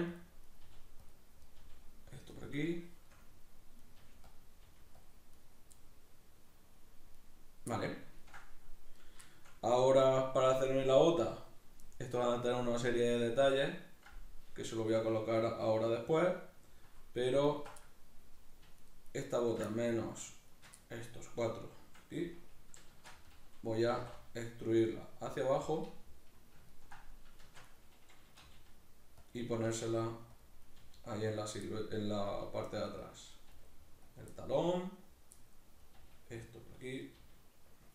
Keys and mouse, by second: 0.2 click, 0.5 right click, 0.7 g, 1.2 click, 1.4 right click, 1.6 g, 2.2 click, 2.4-3.8 middle drag, 3.8 right click, 4.0 g, 4.4 click, 4.7 g, 5.1 click, 5.4 right click, 5.8-7.2 middle drag, 7.2 right click, 7.7-9.0 middle drag, 9.0 right click, 9.3-17.5 shift+middle drag, 17.5 alt+right click, 17.8-18.8 middle drag, 18.8 shift+right click, 19.1 shift+right click, 19.4 shift+right click, 19.7 middle click, 20.5 shift+right click, 20.8-25.4 middle drag, 22.9 shift+Tab, 23.9 e, 25.4 click, 25.5-27.7 middle drag, 27.4 shift+Tab, 27.7 right click, 28.4 g, 29.3 click, 29.5 right click, 29.6 g, 30.4 click, 30.7 right click, 30.8 g, 31.5 click, 31.7 middle click, 32.3 right click, 32.4 g, 33.1 click, 33.4 right click, 33.5 g, 34.2 click, 34.4-35.8 middle drag, 35.8 right click, 36.0 g, 36.9 click, 37.0 right click, 37.2 g.